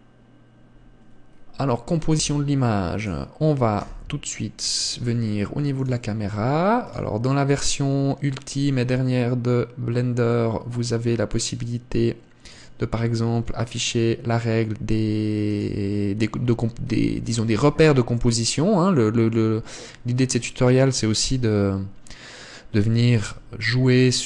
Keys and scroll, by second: 2.6 Escape, 4.3 KP_0, 23.7 g.